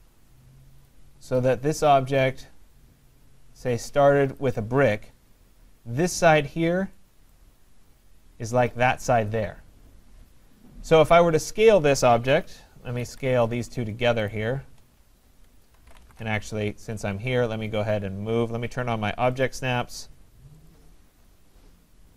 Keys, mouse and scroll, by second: 1.0 click, 1.8 click, 4.4 click, 7.3 right click, 7.6 middle click, 8.0 middle click, 10.3 scroll, 12.3 s, 13.1 Escape, 14.3 shift+click, 15.6-16.6 typing, 19.3-21.0 typing, 19.5 click, 20.7 click.